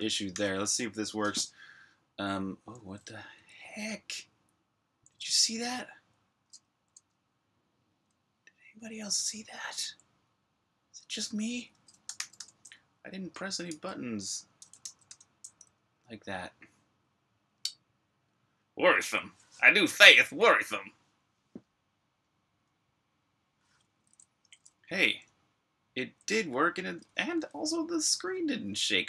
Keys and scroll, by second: 0.2 super+r, 0.3-1.8 typing, 5.5 u, 6.8 Escape, 11.7-15.1 typing, 23.9-29.0 typing.